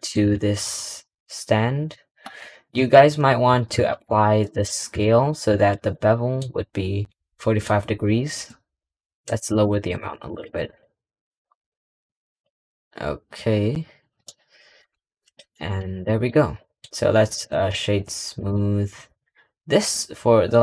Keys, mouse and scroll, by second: 4.9-5.2 middle drag, 5.8-6.4 middle drag, 6.4-7.0 scroll up 1, 7.0 middle drag, 14.1-15.1 middle drag, 15.1 click, 15.4 middle click, 16.2 scroll down 3, 16.5 middle click, 17.2 click, 17.4-18.5 right drag, 18.5-18.8 scroll up 2, 19.0 click, 19.3 scroll up 1.